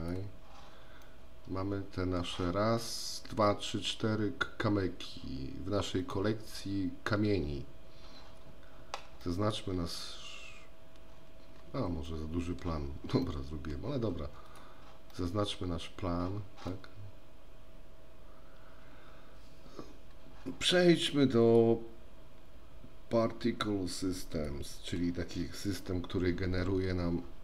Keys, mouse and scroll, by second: 0.0 click, 1.1-2.3 middle drag, 6.0 click, 9.3-9.6 middle drag, 12.1-12.7 middle drag, 13.3-13.8 middle drag, 14.5 click, 15.3 middle drag, 21.5 click, 24.4 click.